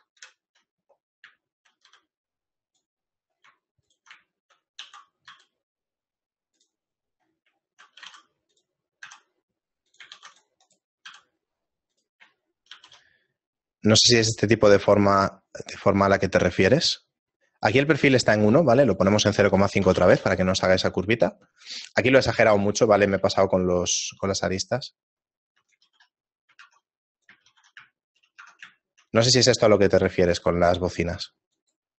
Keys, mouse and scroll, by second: 1.1 ctrl+KP_Add, 1.4 shift+middle click, 2.3 x, 3.9 alt+right click, 4.3 shift+middle click, 5.5 e, 7.2 middle click, 7.4-7.8 scroll down 4, 7.8 middle click, 8.1 g, 9.1 s, 10.2 ctrl+r, 11.1 s, 12.8 ctrl+b, 18.9 click, 22.0 shift+middle click, 23.1 alt+right click, 23.7 alt+shift+right click, 25.4 alt+shift+right click, 25.5 alt+right click, 25.8 ctrl+x, 26.6 ctrl+Tab, 27.5 ctrl+x, 28.0 shift+middle click, 28.8 Tab, 28.8 shift+middle click, 29.8 click.